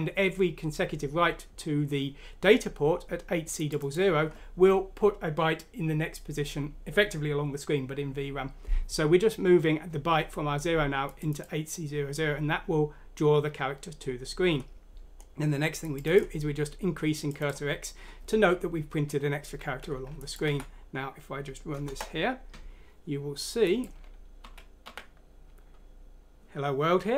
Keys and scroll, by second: 20.4 F6, 21.8 Return, 24.4-24.8 typing.